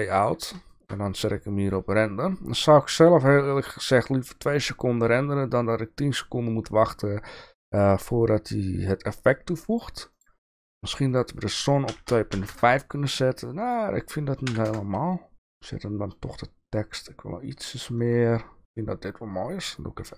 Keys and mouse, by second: 0.8 shift+middle click, 2.7 click, 3.9 click, 9.7 click, 11.1-15.4 drag.